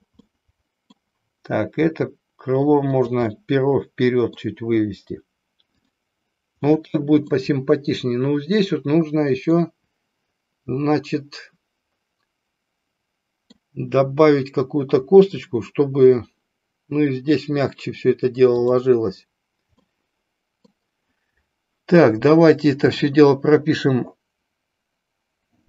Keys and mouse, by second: 0.3 middle click, 2.0 r, 3.5-4.5 middle drag, 5.7 click, 6.7-7.5 middle drag, 9.6-13.6 middle drag, 18.7 drag, 19.8-20.7 middle drag.